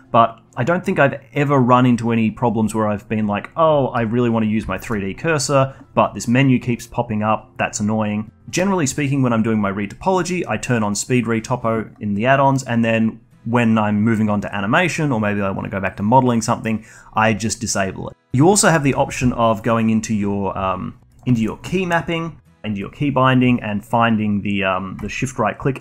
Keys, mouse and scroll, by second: 5.6-7.5 shift+right drag.